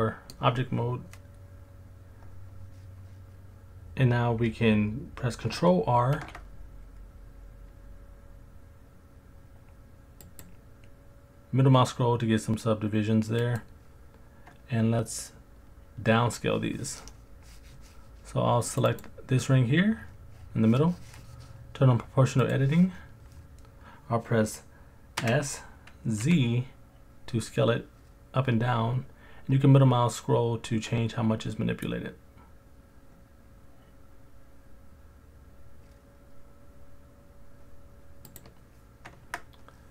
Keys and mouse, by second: 6.2 ctrl+r, 13.4 click, 18.7 click, 18.9 click, 22.4 click, 25.2 s, 26.2 z, 38.3 click, 39.2 Tab.